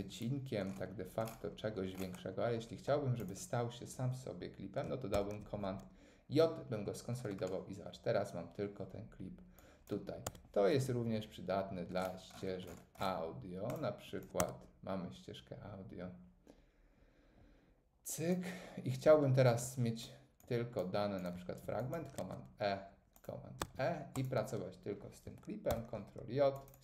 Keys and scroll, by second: 5.1 super+j, 10.3 Tab, 14.4 Tab, 22.2 super+e, 25.7 super+j.